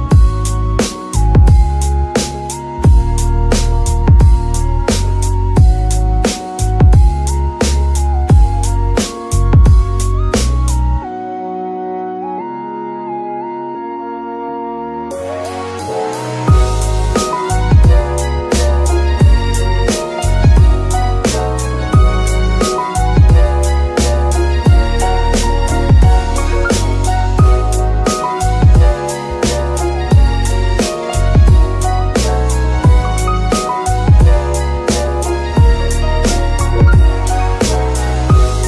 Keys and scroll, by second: 0.7 g, 3.0 KP_1, 4.9 g, 9.3 KP_7, 10.3 g, 10.4 y, 13.8 g, 15.5 shift+g, 15.7 shift+y, 17.2 g, 21.3 g, 22.8 KP_1, 24.2 g, 26.2 KP_7, 27.3 z, 29.9 shift+n.